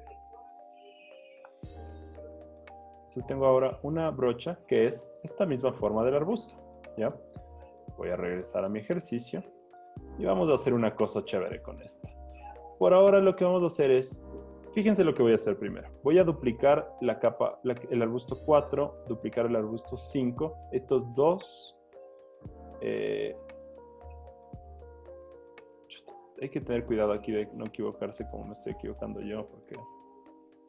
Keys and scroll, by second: 0.1-0.9 typing, 2.7 super+z, 3.6 alt+super+z, 5.4 z, 7.0 b, 9.1 z, 18.3 super+j, 20.2 super+j, 23.5 super+z, 24.2 alt+super+z, 30.0 super+j.